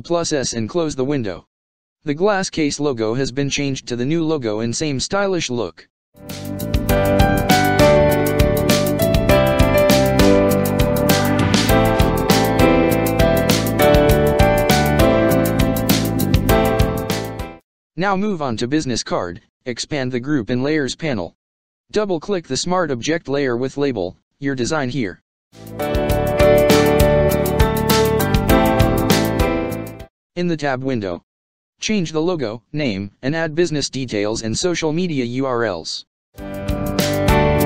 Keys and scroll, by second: 2.9 ctrl+space, 3.4 ctrl+space, 7.6 ctrl+-, 8.6 space, 18.8 ctrl+space, 19.1 ctrl+space.